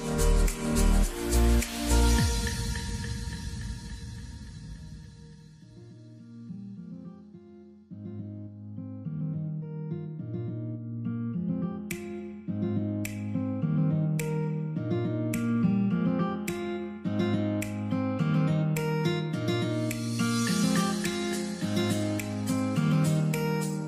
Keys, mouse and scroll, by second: 0.9 double click, 2.2 shift+s, 2.6 shift+space, 2.9 shift+a, 3.3 shift+y, 4.5 Return, 7.2 Return, 8.8 double click, 11.7 ctrl+d, 15.1 ctrl+d, 16.7 w, 18.8 w, 18.8 double click.